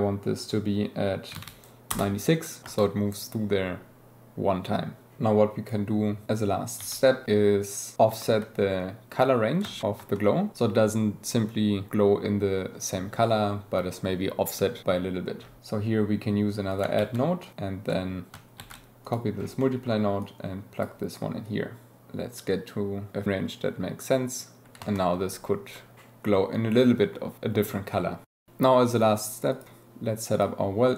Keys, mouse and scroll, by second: 2.6 space, 5.2 click, 5.2 g, 6.7 g, 8.2 shift+click, 9.6 space, 16.7 click, 17.4 click, 17.9 click, 19.0 click, 20.2-20.8 drag, 21.4-24.6 shift+drag.